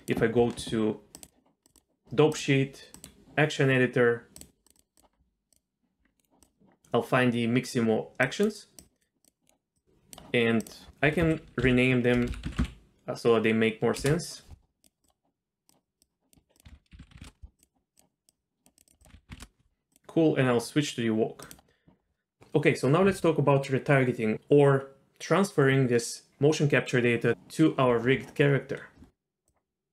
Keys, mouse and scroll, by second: 0.0 click, 1.6 click, 2.4 click, 2.9 click, 4.4 click, 4.6 click, 5.5 click, 6.4 click, 8.2 click, 8.8 click, 9.2 click, 9.7-10.1 drag, 10.6-14.0 drag, 12.3 BackSpace, 14.8 click, 15.0 click, 16.0 click, 16.6 click, 17.6 click, 18.3 click, 18.7 click, 19.0 click, 19.9-21.5 drag, 29.5 click.